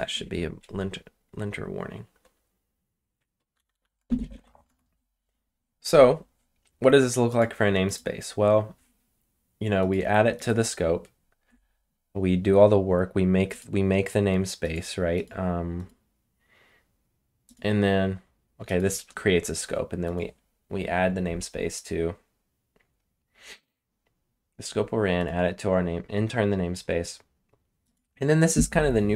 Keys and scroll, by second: 3.2-4.6 typing.